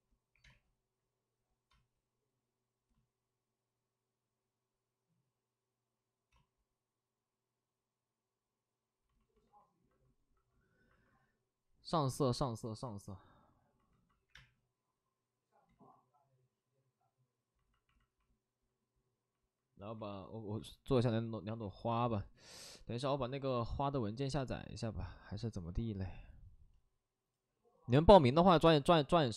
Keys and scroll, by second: 0.2 3, 0.4 space, 1.7 space, 6.2 space, 6.3 space, 7.4 space, 14.2 3, 14.3 space, 15.6 ctrl+z.